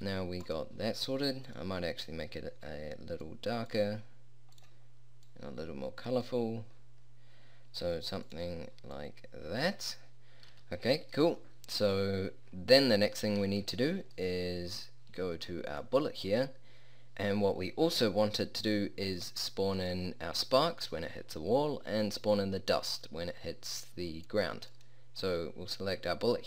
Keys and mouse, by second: 1.5-3.3 middle drag, 10.5 a, 17.9-19.2 drag, 21.7 click, 24.1 click.